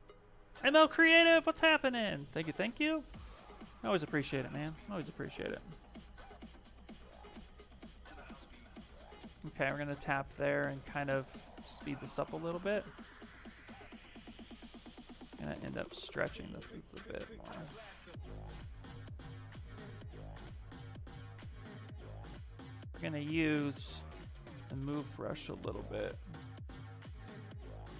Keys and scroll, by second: 19.7 Caps_Lock, 21.6-23.8 typing.